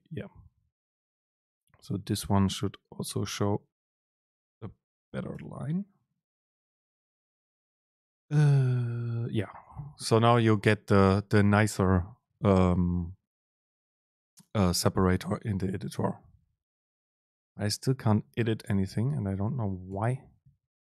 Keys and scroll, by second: 5.5 ctrl+shift+super+F9, 18.5 Down, 19.2 Up.